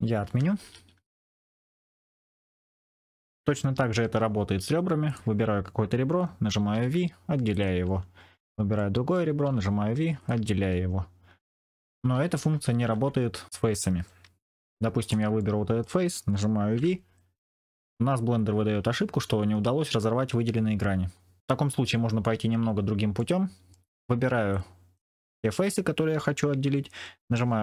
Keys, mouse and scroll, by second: 0.4 ctrl+z, 0.6 ctrl+z, 0.7 ctrl+z, 0.9 ctrl+z, 1.1 ctrl+z, 1.7 ctrl+z, 3.8 2, 5.0 click, 6.6 v, 8.3 click, 8.7 middle click, 9.4 v, 11.9 ctrl+z, 12.1 ctrl+z, 12.5 ctrl+z, 12.7 ctrl+z, 14.4 3, 15.0 click, 15.3 middle click, 16.7 v, 23.2 middle click, 24.6 click.